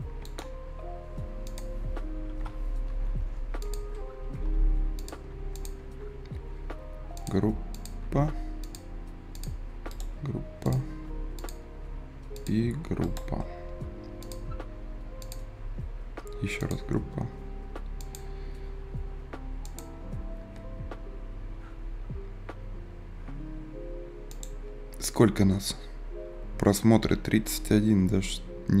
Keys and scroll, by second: 4.4 Escape.